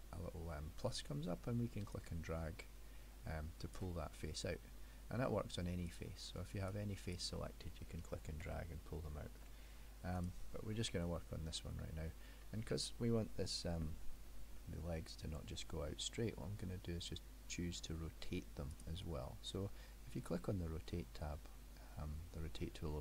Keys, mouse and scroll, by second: 2.0 click, 4.4-4.7 scroll down 1, 4.7 middle click, 5.9 click, 6.8 click, 8.5 ctrl+z, 10.2 click, 10.8 middle click, 12.5 middle click, 14.6 middle click, 18.8 click.